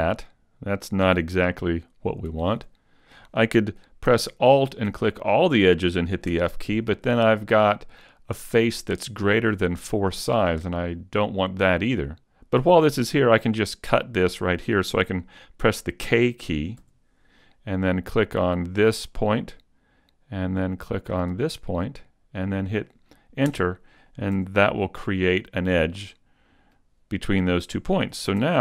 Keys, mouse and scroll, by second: 2.3 super+z, 4.6 alt+right click, 6.3 f, 16.8 k, 24.3 a, 25.7-26.4 scroll down 3, 26.2 middle click, 28.4 ctrl+Tab.